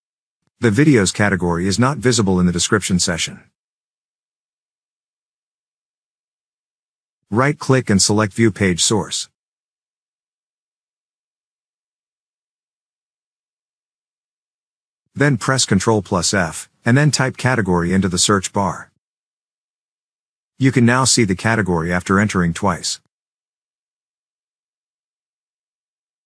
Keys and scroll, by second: 4.1 scroll up 1, 16.1 ctrl+f, 19.3 typing, 21.6 Return, 22.5 Return.